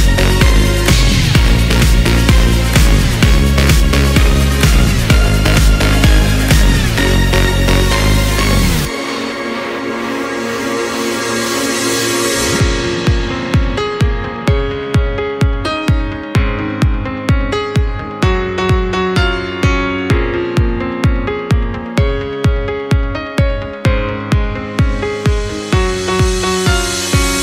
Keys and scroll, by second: 18.1 ctrl+x, 18.1 ctrl+shift+v.